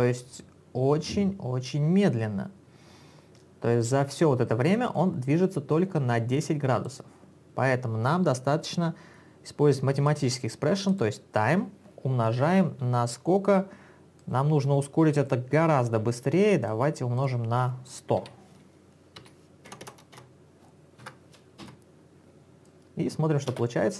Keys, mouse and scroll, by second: 0.4 click, 10.3 click, 14.3 click, 16.7 click, 18.3-21.1 typing, 21.7 Return, 22.7 click, 23.7 space.